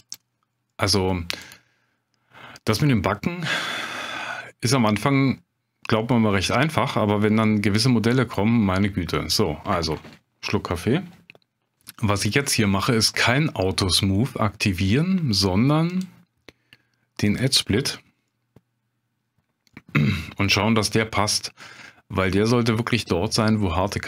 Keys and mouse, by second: 0.0 click, 0.7-1.0 middle drag, 3.2-4.1 middle drag, 6.1-6.4 middle drag, 15.9-17.4 drag, 18.3-19.3 middle drag, 19.7 middle drag, 20.2-21.4 middle drag, 21.8-22.5 middle drag, 22.8-23.3 middle drag, 23.5-24.0 middle drag.